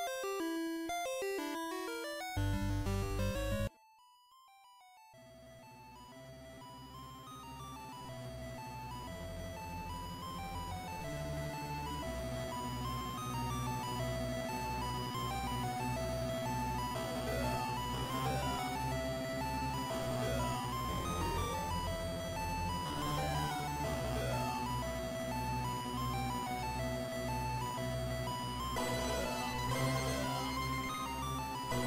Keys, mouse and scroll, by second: 0.2-0.5 scroll down 1, 0.5 middle click, 3.6 middle click, 16.5 KP_1, 19.2 right click, 19.6-20.8 scroll up 1, 20.8-21.2 scroll up 1, 24.2 Tab, 26.0 shift+middle click, 27.3 click.